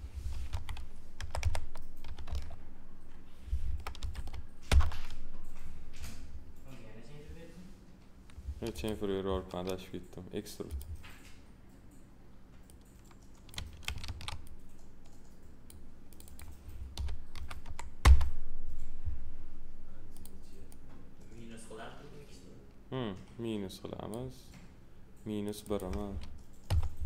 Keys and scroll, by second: 0.5 Left, 1.1 BackSpace, 2.0 2, 2.2 Return, 3.6 0, 4.6 Return, 14.0 ctrl+z, 16.9 1, 18.0 Return, 26.6 -.